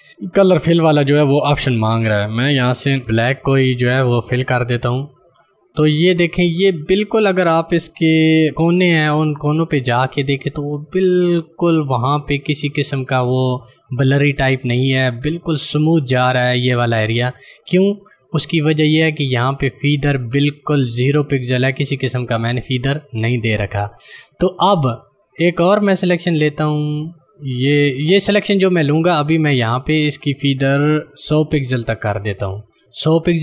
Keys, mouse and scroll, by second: 1.0 click, 8.4 d, 9.5 click, 19.5 click, 22.9 click, 23.3 right click, 23.7 click, 26.1 click, 29.2 click.